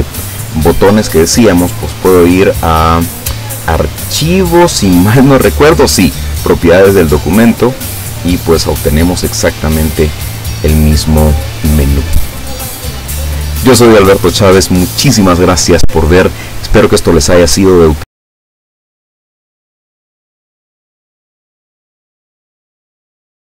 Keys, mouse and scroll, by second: 1.6 click, 7.0 click, 8.6 click, 9.3 click, 10.0 click, 10.5 click, 10.8 click, 11.1 click, 12.4 click.